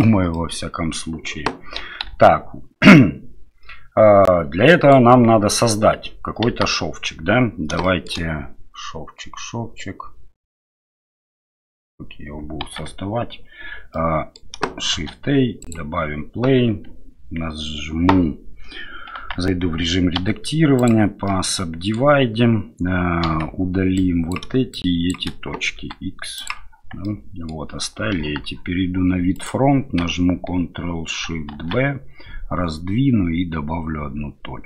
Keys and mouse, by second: 0.3 middle click, 2.1 Delete, 2.8-4.9 drag, 6.5 KP_1, 7.8 shift+drag, 12.6 Tab, 13.9-14.3 drag, 14.9 shift+a, 20.2 w, 21.3 middle click, 23.2 KP_7, 24.0 click, 25.8 x, 27.0 middle click, 28.1 KP_1, 29.3 click, 31.5 ctrl+shift+b.